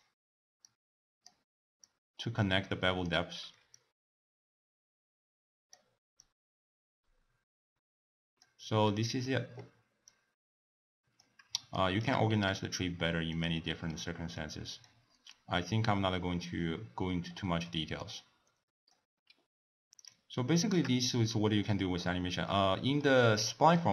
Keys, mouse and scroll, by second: 0.6-1.9 drag, 3.7-6.3 drag, 8.9-10.1 middle drag, 10.1-11.7 drag, 11.7-12.3 shift+right drag, 12.3 g, 13.6-14.4 middle drag, 14.4 click, 15.3 click, 17.4-18.0 middle drag, 18.0 click, 19.5-19.9 scroll down 1, 19.9 click, 20.5-23.9 shift+middle drag.